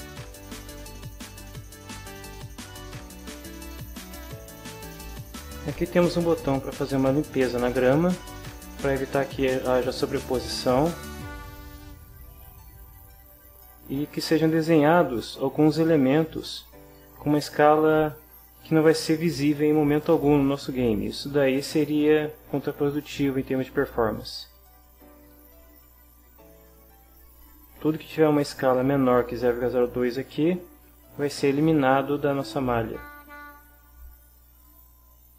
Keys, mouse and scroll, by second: 1.8 click, 10.2-12.4 drag, 15.0-16.6 drag, 20.2-23.0 drag, 24.5 click, 26.1-27.6 drag, 31.6-34.6 drag.